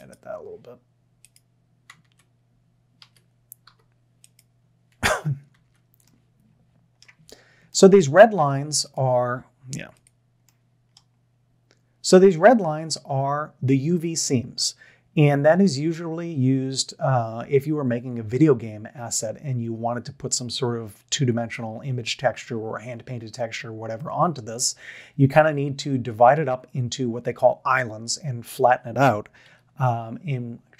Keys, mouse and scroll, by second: 0.0 a, 2.1 Tab, 3.0 a, 3.7 u, 5.5 Tab, 7.1 Tab, 7.7-8.4 middle drag, 10.5-11.0 middle drag, 12.6 middle click, 24.1 shift+middle click, 29.4 a.